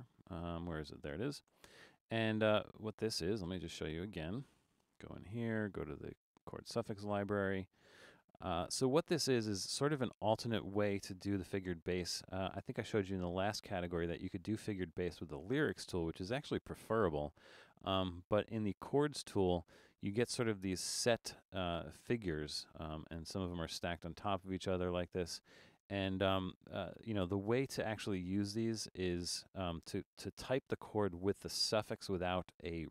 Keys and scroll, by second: 4.9 Return.